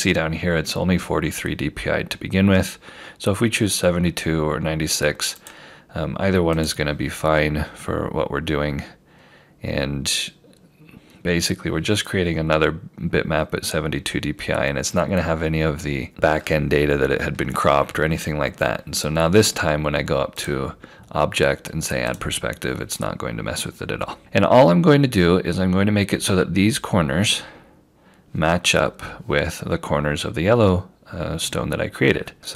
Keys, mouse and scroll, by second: 5.4 click, 20.4 click, 31.4-32.5 scroll up 1.